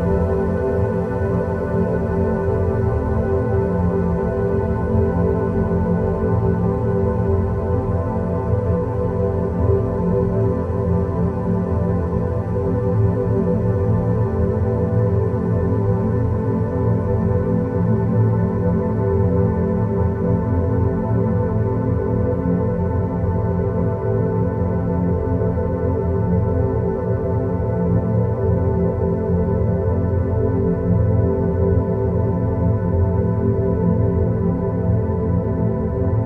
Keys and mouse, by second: 2.7 g, 5.2 click, 6.1 click, 8.6-10.2 drag, 12.0 click, 12.3 click, 13.3 click, 15.5 click, 15.7-29.9 drag, 31.9 click, 32.7-33.4 middle drag, 34.6-35.1 middle drag.